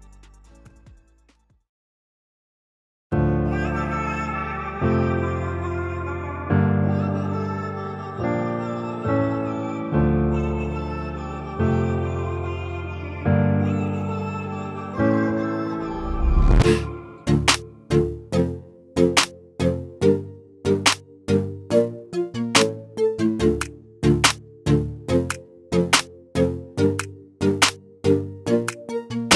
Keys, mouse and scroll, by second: 0.0-6.6 drag, 10.7 click, 19.0 click, 24.8 click, 28.0 click.